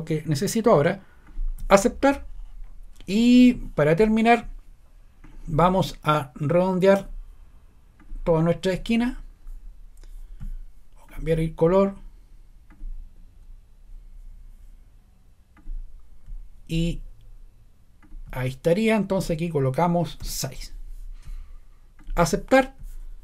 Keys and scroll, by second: 20.2 6.